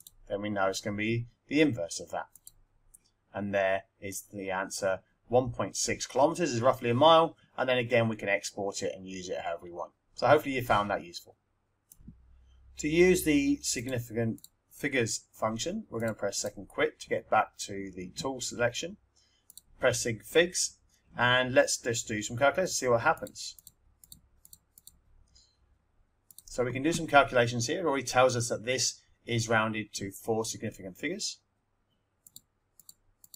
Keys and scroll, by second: 0.0 Up, 2.3 Return, 19.4 1, 22.9-25.2 typing, 26.2 -, 32.0-33.3 typing.